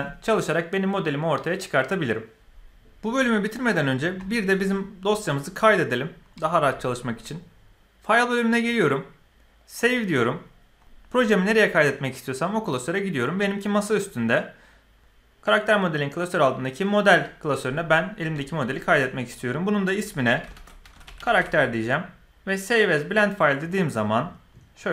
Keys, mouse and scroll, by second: 8.1-9.8 drag.